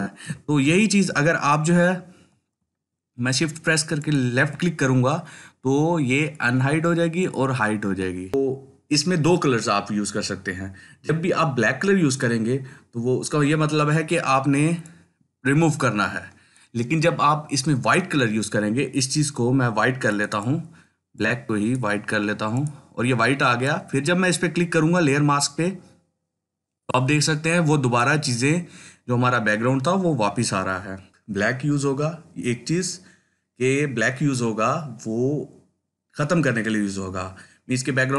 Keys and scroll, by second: 0.5 ctrl+alt+z.